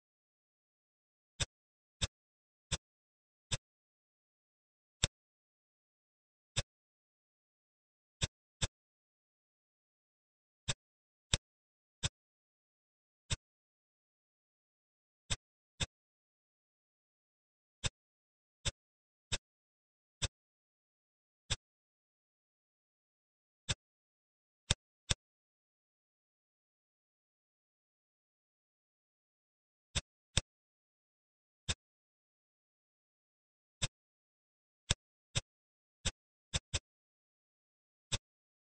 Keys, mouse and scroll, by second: 0.1 shift+d, 1.9-2.7 drag, 3.4 click, 4.4 ctrl+z, 4.9 click, 6.5-8.0 drag, 8.1-9.6 middle drag, 9.6 s, 11.2 click, 13.2-14.5 middle drag, 14.5 s, 15.7 click, 17.7 click, 18.2-18.5 scroll up 2, 18.5-19.2 middle drag, 19.2 click, 20.1 click, 21.4 click, 22.8-23.6 scroll up 3, 23.6-24.6 middle drag, 24.6 drag, 25.0-26.5 middle drag, 26.5 ctrl+s, 26.8-27.3 scroll down 4, 27.3-28.8 middle drag, 30.0 drag, 30.3-32.0 middle drag, 32.0 scroll up 2, 32.3-33.7 middle drag, 33.7 click, 34.8 drag, 35.2 click, 38.1 click, 38.4-38.7 scroll down 2.